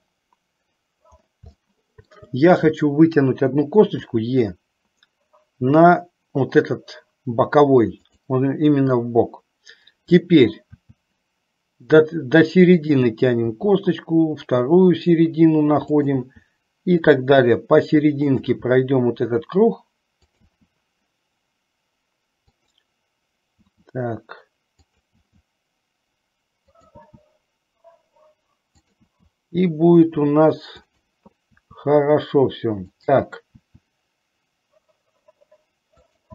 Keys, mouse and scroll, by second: 1.8 shift+middle click, 4.2 e, 11.0 e, 13.6 e, 16.5 e, 18.6 e, 21.0 e, 23.7 e, 25.2 e, 27.8 e, 30.0 e, 32.8 e, 34.4 e.